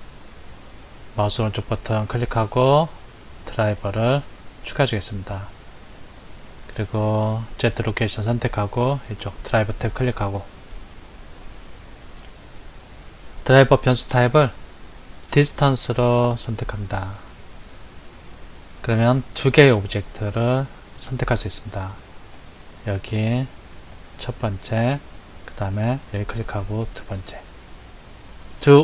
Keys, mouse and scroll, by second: 1.7-4.7 right drag, 7.3 click, 9.7 click, 11.7 click, 22.3 click, 25.9 click.